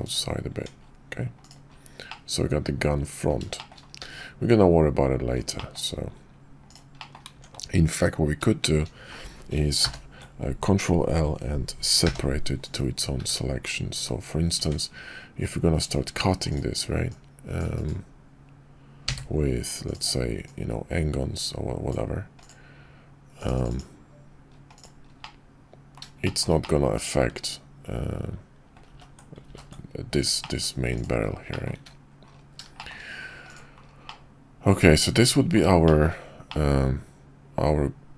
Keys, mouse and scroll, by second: 0.5 Tab, 2.1-3.3 drag, 3.5 shift+click, 4.0 `, 5.5 shift+middle click, 7.0 middle click, 7.3 Tab, 9.8 ctrl+l, 12.0 p, 13.2 `, 13.9 `, 14.6 Tab, 17.6-19.0 drag, 19.0 d, 25.2-26.0 middle drag, 26.2 shift+click, 26.6-28.2 drag, 28.2-28.7 middle drag, 28.7-29.1 ctrl+drag, 28.9 ctrl+z, 29.7 ctrl+z, 30.4 click, 31.5 middle drag, 32.8 shift+middle click, 34.0-35.5 middle drag, 35.8 shift+middle click, 36.4-38.1 middle drag.